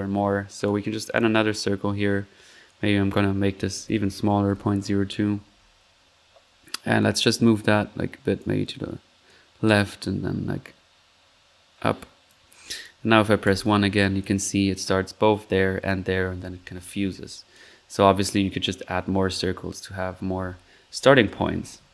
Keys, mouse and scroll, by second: 0.6 drag, 1.6 middle click, 2.6 click, 6.9-8.5 drag, 9.2-13.0 drag, 13.0 middle click, 13.4 1, 13.9-14.5 drag, 17.3 click, 17.6 drag, 17.8 middle click, 19.5 1.